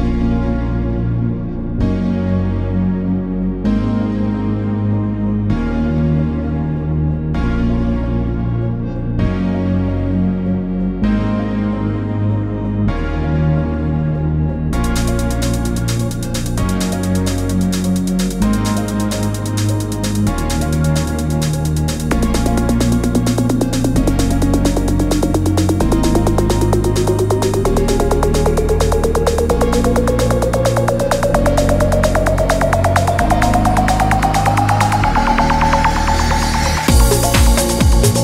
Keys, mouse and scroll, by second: 2.5 ctrl+s.